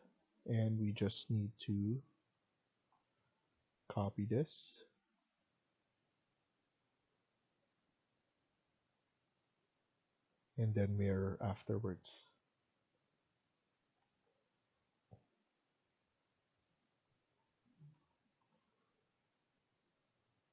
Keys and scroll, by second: 1.6 Left, 2.2 Left, 13.9 Escape, 14.5 Escape, 20.4 Up.